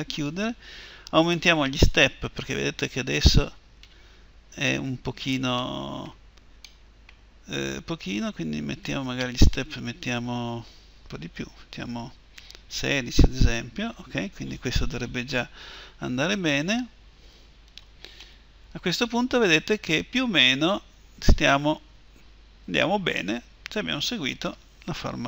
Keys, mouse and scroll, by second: 9.3-11.2 drag, 18.0-19.7 middle drag, 19.7 click, 20.1-22.3 middle drag, 23.1 middle click.